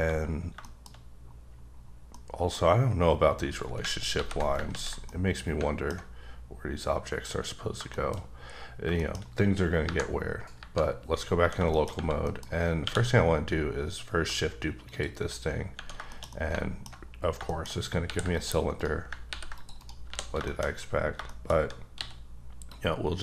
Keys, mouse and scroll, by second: 0.0-0.6 scroll down 2, 0.6 shift+middle click, 1.4-1.9 scroll down 4, 1.9 scroll up 1, 2.1 middle click, 4.1 alt+g, 4.7 ctrl+z, 5.1 middle click, 6.0-6.6 scroll up 1, 6.6-7.5 scroll up 2, 7.5-7.9 scroll down 2, 7.9 shift+middle click, 8.3-8.8 scroll up 2, 9.0 shift+middle click, 9.8 KP_Divide, 10.5 KP_Divide, 11.7 shift+middle click, 12.2 middle click, 12.8 q, 14.8 shift+click, 16.1 shift+middle click, 17.1-17.4 scroll up 2, 17.5 shift+middle click, 17.6-18.0 shift+scroll down 3, 18.0 ctrl+r, 18.3 click, 18.8 right click, 19.3 ctrl+r, 19.5 click, 19.8 right click, 20.1 3, 20.4 shift+middle click, 20.6-21.1 scroll up 2, 21.1 shift+scroll down 1, 21.2 shift+middle click, 21.9 c, 22.1-22.7 scroll down 1, 22.7 click.